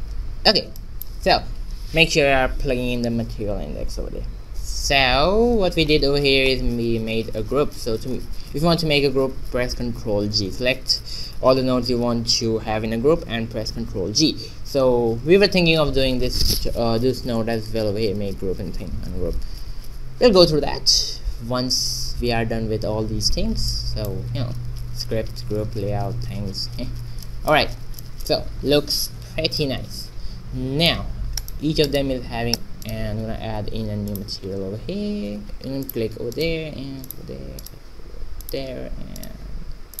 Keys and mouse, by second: 0.4-2.8 middle drag, 5.7-7.4 middle drag, 7.4 Tab, 15.0 shift+a, 20.5 shift+a, 24.1 shift+a, 29.5 click, 31.3-35.3 right drag, 34.7 click, 36.9-40.0 middle drag.